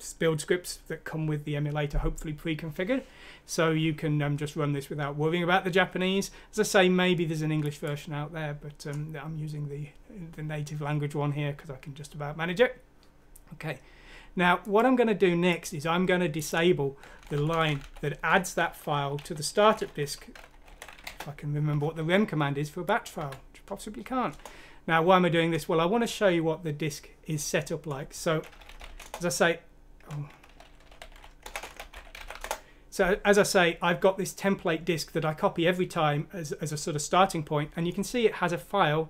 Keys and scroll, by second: 17.7 Up, 17.8 Up, 18.3 Home, 19.2-21.5 typing, 22.7-23.4 typing, 24.3 Return, 28.4-29.4 typing, 30.7-33.1 typing.